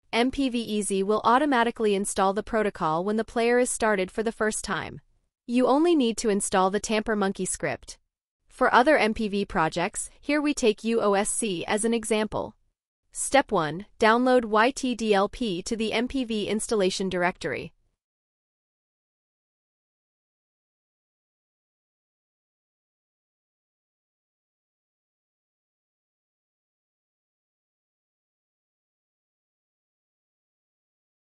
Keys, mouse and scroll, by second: 15.7 ctrl+click, 20.6 ctrl+click, 24.2 click, 28.0 click.